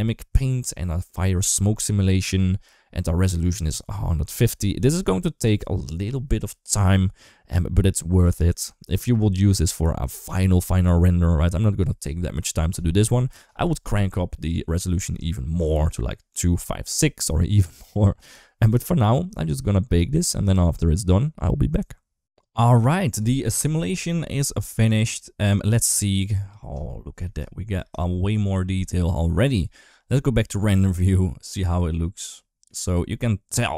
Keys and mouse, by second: 0.5 middle click, 1.3 shift+middle click, 22.0 ctrl+s, 24.9-26.6 drag, 27.1 middle click, 27.9 shift+middle click, 29.5 middle click, 32.1 middle click, 33.4 middle click.